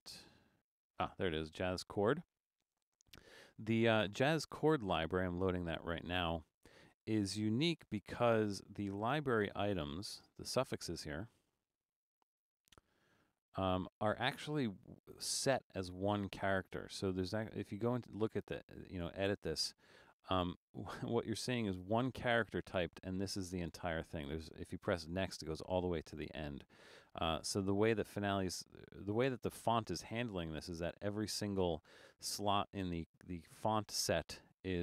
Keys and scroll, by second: 7.8 Return.